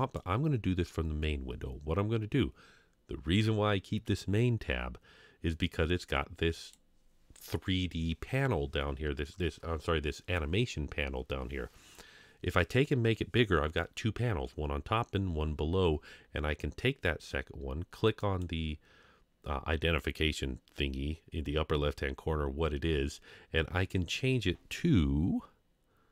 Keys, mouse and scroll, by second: 0.0 click, 5.6-6.8 drag, 18.2-26.1 drag.